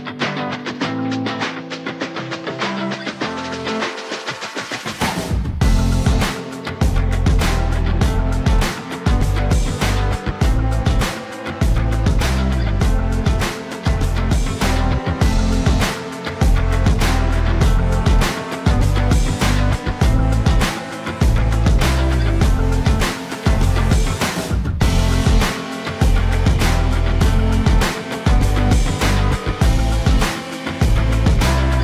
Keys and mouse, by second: 1.2 middle click, 1.7 middle click, 2.1 shift+middle click, 2.5 middle click, 3.3 shift+middle click, 4.7 click, 5.3-8.5 drag, 9.0 shift+middle click, 9.5-11.0 middle drag, 11.4 shift+middle click, 12.2 middle click, 12.7 shift+z, 13.3 shift+z, 13.9-15.2 drag, 15.6 middle click, 17.4 click, 19.4-20.8 drag, 21.1-22.4 middle drag, 23.1 middle click, 24.7 Tab, 25.2 middle click, 26.9 middle click, 28.6 middle click, 30.0 shift+middle click, 30.6 middle click.